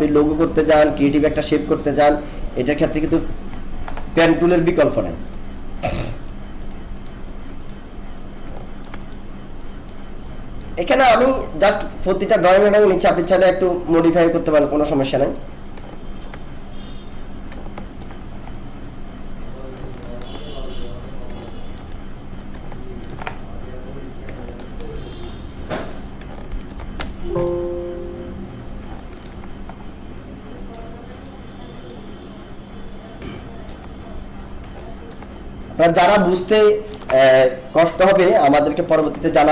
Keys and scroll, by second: 27.0 alt+space.